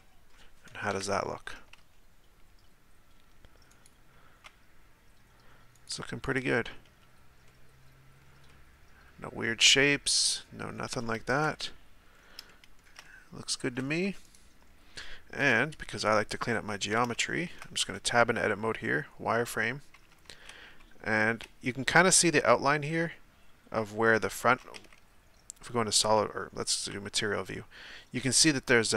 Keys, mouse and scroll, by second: 0.0-0.9 middle drag, 0.9 KP_1, 1.9 z, 3.7-5.9 right drag, 6.2-7.0 right drag, 7.0 z, 7.4-11.4 middle drag, 11.4 KP_7, 12.1-12.5 scroll up 3, 12.5-14.2 shift+middle drag, 14.2 right click, 14.9-15.4 scroll down 1, 15.4 KP_1, 17.4 shift+middle click, 17.8 Tab, 18.8 z, 19.9 a, 20.1 a, 24.9 z, 25.6-26.1 scroll down 2, 26.9 z.